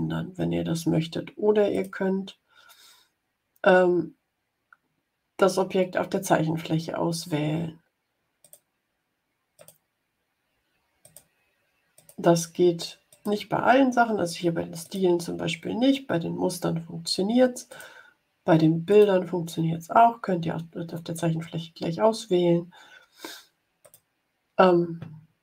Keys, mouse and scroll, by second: 1.7 click, 8.3 click, 9.5 click, 10.9 click, 11.9 click, 13.0 click, 14.7 click, 17.6 click, 18.8 click, 23.7 click.